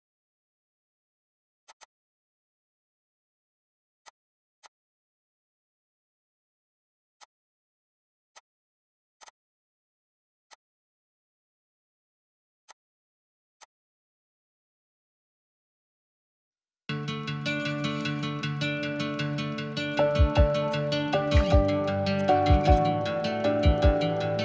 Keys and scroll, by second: 1.7-3.5 typing, 13.2 m, 15.6-17.6 typing, 19.6 Delete, 22.6-24.4 typing.